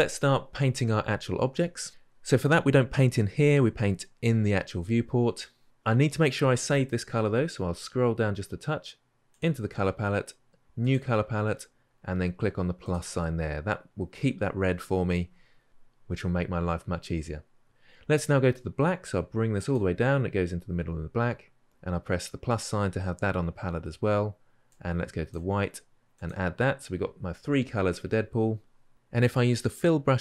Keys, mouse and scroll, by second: 18.6-30.2 drag.